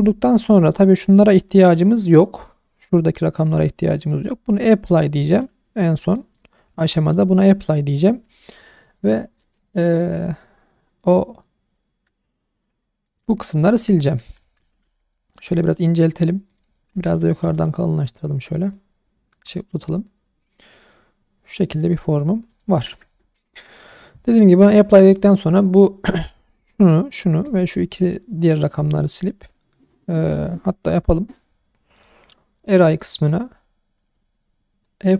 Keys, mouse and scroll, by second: 0.1-0.4 scroll down 2, 0.5 shift+middle drag, 4.1-5.2 scroll up 2, 5.2-5.9 scroll down 2, 5.9 scroll up 2, 6.1 shift+middle drag, 6.5 scroll up 2, 6.9 shift+middle drag, 12.3-12.8 scroll down 1, 12.8 scroll up 2, 13.0 shift+middle click, 13.6 Tab, 14.2 a, 14.6 s, 14.8 x, 16.5 click, 16.9 s, 17.4 y, 21.8 click, 22.2-22.7 scroll down 3, 22.6 shift+middle click, 23.0 Tab, 23.6 click, 25.0 click, 31.9 click, 32.8 click.